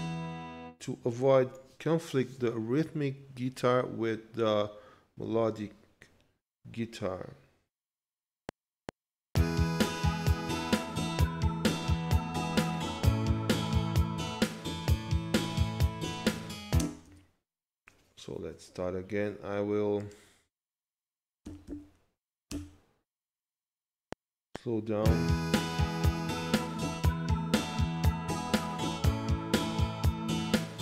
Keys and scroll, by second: 8.3 F7, 16.7 space, 17.0 z, 22.5 Return, 24.0 F7.